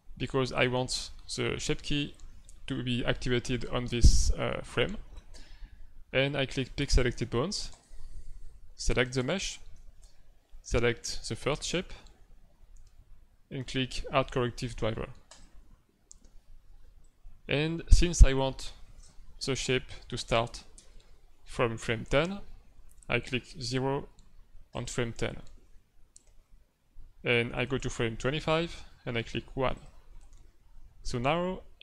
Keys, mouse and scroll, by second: 0.6 middle click, 7.7 click, 9.0 right click, 15.2 click, 17.0 click, 20.7 Right, 24.7 click, 26.1 click, 27.7 Right, 29.7 click, 30.7-31.8 Left.